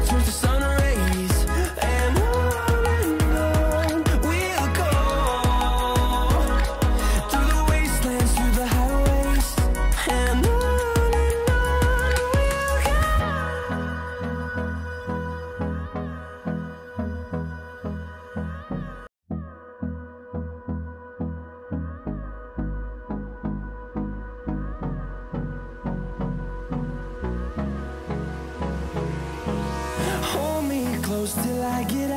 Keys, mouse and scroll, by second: 0.2-8.1 drag, 8.7-9.6 scroll up 1, 9.6-10.1 scroll down 1, 10.1-15.5 drag, 15.5-16.2 scroll up 1, 16.2-20.3 drag, 20.3 right click, 20.8 click, 23.2-28.8 drag, 30.8 Up.